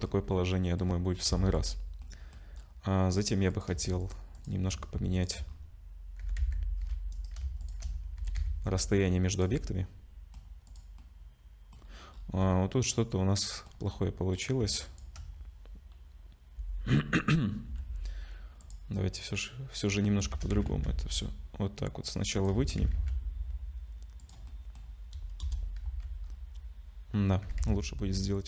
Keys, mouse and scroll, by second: 0.0-1.1 scroll down 7, 0.5 middle click, 1.3 ctrl+s, 1.5 click, 2.0 middle click, 2.6 scroll up 4, 3.5 click, 4.0 shift+click, 4.4 click, 5.4 shift+click, 5.5-5.9 scroll down 5, 6.2 g, 7.6 shift+click, 8.2 g, 9.5 middle click, 10.7 click, 11.0 middle click, 11.8-12.4 scroll up 7, 12.4 middle click, 13.9-14.3 scroll up 2, 14.3 click, 14.9 shift+click, 17.7 Delete, 18.6 click, 19.0 middle click, 20.3 shift+d, 22.6 shift+d, 24.5 middle click, 25.4 KP_0, 25.8 z, 26.2-27.4 scroll up 6, 27.4 g.